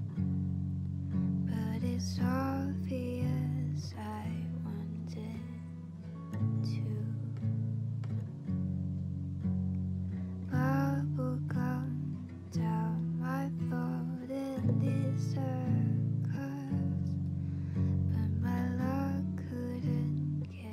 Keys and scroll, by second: 1.3 ctrl+space, 2.1-3.5 typing, 3.8 Down.